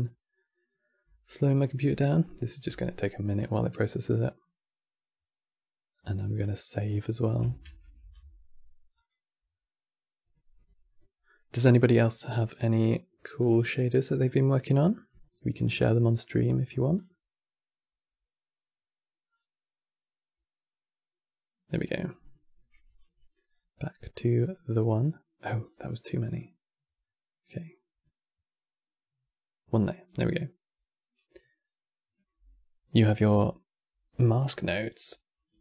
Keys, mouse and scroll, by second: 0.8 click, 3.1 click, 7.4 ctrl+s, 8.6-11.7 drag, 13.1-23.9 drag, 25.3 click, 26.0-29.1 drag.